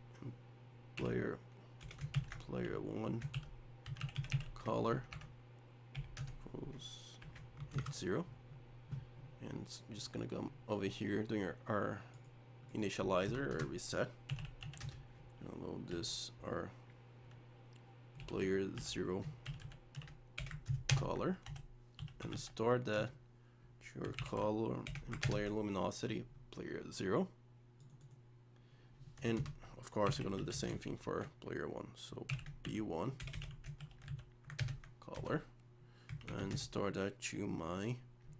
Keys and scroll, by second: 20.9 ctrl+space, 25.2 ctrl+space, 34.6 ctrl+space.